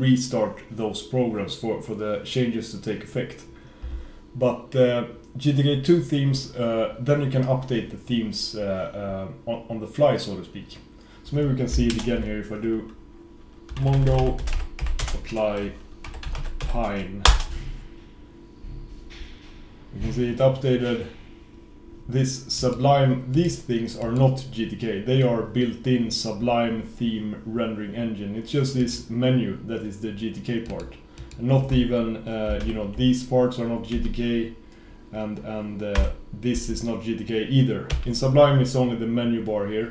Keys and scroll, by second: 12.0 shift+super+Return.